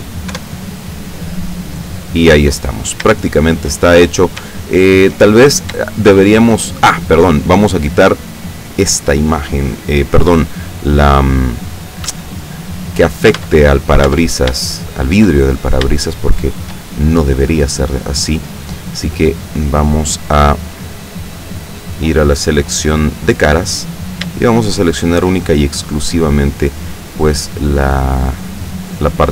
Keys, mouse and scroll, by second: 0.4 F12, 2.4-3.4 scroll down 1, 3.4 shift+middle click, 4.1 shift+scroll up 2, 4.8 shift+middle click, 5.4-5.8 shift+scroll up 2, 6.0 shift+middle click, 12.1 Escape, 13.4 Tab, 13.7 right click, 14.1 Tab, 14.7 shift+middle click, 15.6-16.0 scroll up 1, 16.1 shift+middle click, 17.3-17.6 scroll up 1, 23.3 click, 23.9 right click, 24.5 shift+right click, 25.0 shift+right click, 27.7 click.